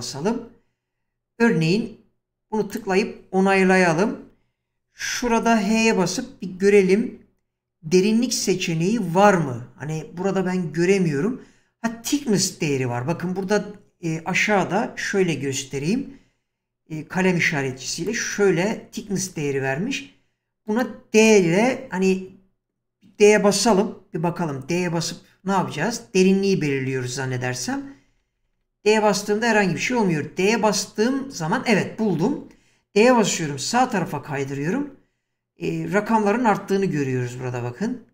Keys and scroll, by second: 5.7 h, 15.8 <, 27.5-28.6 typing, 29.6 typing.